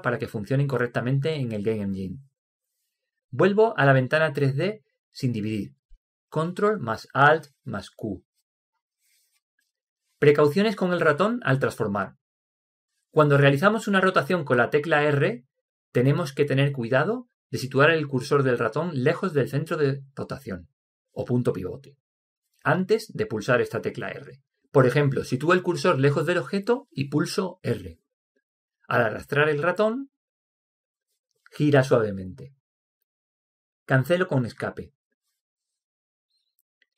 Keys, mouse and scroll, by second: 8.2 ctrl+alt+q, 10.1-13.5 middle drag, 14.5 KP_7, 15.5 middle click, 28.0 r.